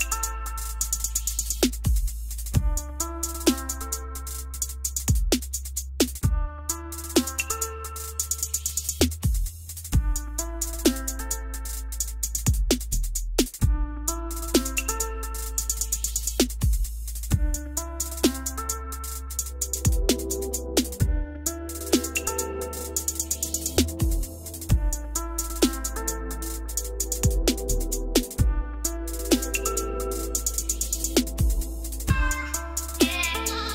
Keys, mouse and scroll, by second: 1.4-2.5 drag, 3.2-3.7 typing, 4.4-5.3 scroll down 8, 5.4-5.9 scroll up 1, 6.1 s, 8.1 ctrl+click, 9.6-10.3 typing, 13.2-14.3 drag, 14.6-15.7 drag, 15.7 F3, 16.9 r, 18.5 click, 19.9 click, 21.2 a, 22.3 click, 22.5 click, 22.7 right click, 24.3 a, 25.3 click, 26.3 click, 27.4 click, 28.1 Escape, 29.3-30.4 drag, 31.1-32.3 drag.